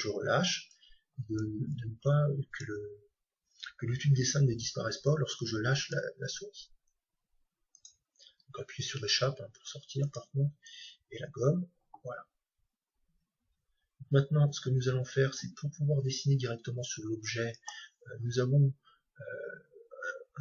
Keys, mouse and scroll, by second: 10.1-11.9 drag.